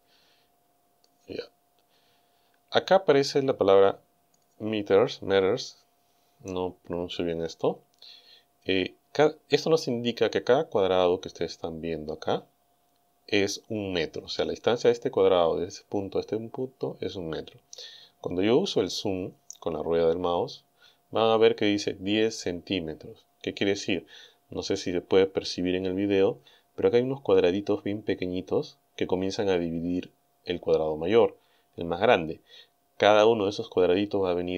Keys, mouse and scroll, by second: 0.7-1.2 scroll down 2, 1.3 scroll down 2, 19.9-20.6 scroll up 4.